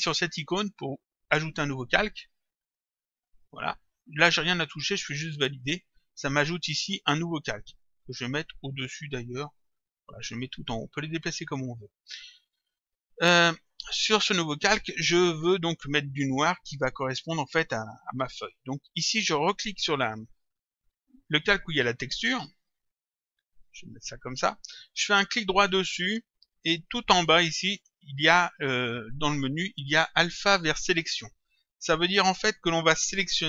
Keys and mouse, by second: 2.7 click, 4.1 click, 5.5 click, 8.2 click, 12.5 click, 19.8 click, 22.9 click, 25.6 right click.